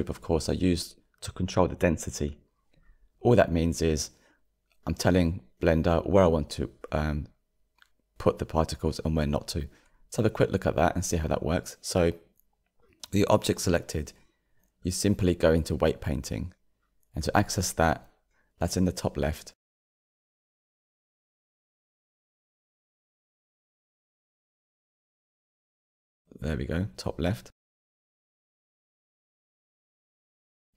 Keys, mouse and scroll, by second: 6.6-7.2 drag, 7.2-9.7 shift+middle drag, 9.7 /, 11.9 Tab, 17.4 click, 17.9 3, 22.2 click, 23.5 click, 26.2-28.3 drag, 28.3 g.